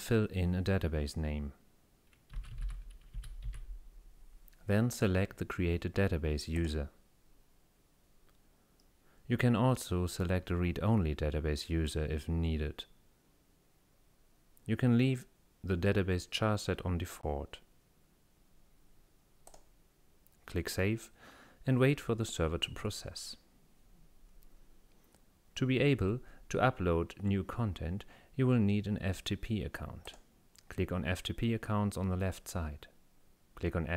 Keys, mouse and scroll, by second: 0.0 click, 2.1-3.5 typing, 5.0 click, 6.6 click, 8.8 scroll down 2, 19.5 click, 30.1 click.